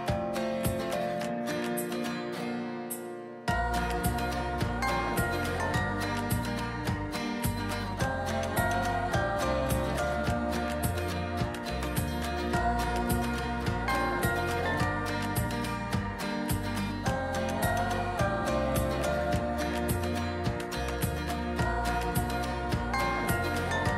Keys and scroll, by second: 0.1 ctrl+t, 9.2 ctrl+r, 10.2 ctrl+t.